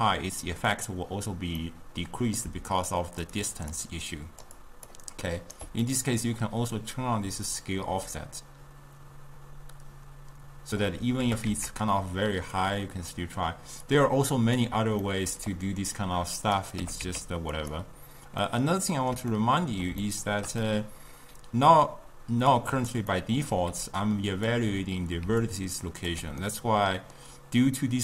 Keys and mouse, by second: 1.7-2.5 middle drag, 2.5-5.6 typing, 3.0-3.3 drag, 3.4 click, 4.3 click, 4.7 click, 5.1 right click, 5.9-7.0 middle drag, 7.0-10.4 drag, 11.3 g, 13.9-15.1 drag, 15.1-16.0 middle drag, 16.0-16.9 drag, 16.9 g, 18.5-22.6 middle drag, 22.6 click, 23.2-23.8 middle drag, 23.8-26.3 typing, 24.1 click, 25.5 click, 26.5-28.0 middle drag.